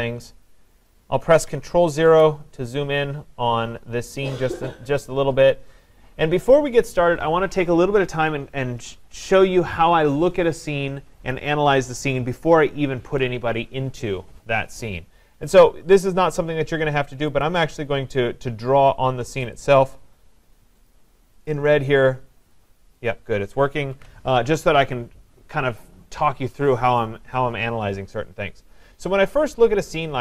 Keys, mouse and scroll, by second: 1.5 click, 2.1 ctrl+0, 17.4 click, 19.4 click, 19.6 click, 20.9 click, 21.5 click, 23.0 click, 24.0 ctrl+z.